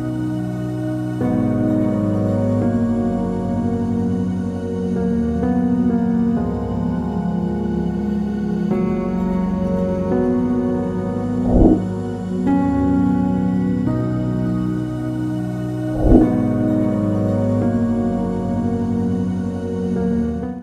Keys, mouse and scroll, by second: 1.3 -.